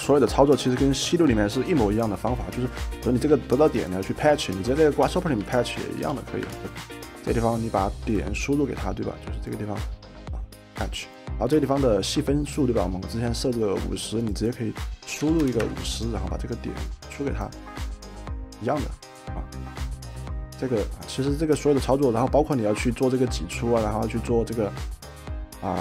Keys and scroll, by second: 4.8-6.7 typing, 10.8 typing, 15.2 5, 15.5 0, 15.6 Return, 20.2-20.9 typing.